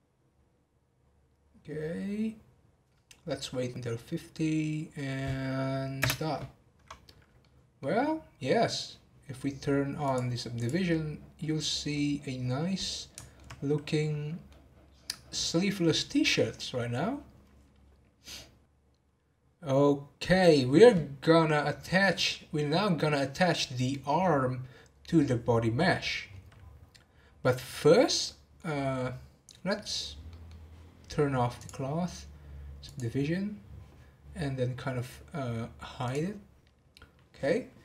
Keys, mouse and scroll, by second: 6.0 space, 7.4-7.9 middle drag, 7.9-9.1 scroll down 1, 10.2 click, 10.6 click, 10.9-11.7 middle drag, 11.7 scroll down 1, 11.9-17.1 middle drag, 18.2-18.6 scroll down 2, 28.2-31.8 middle drag, 31.8 click, 36.0 click.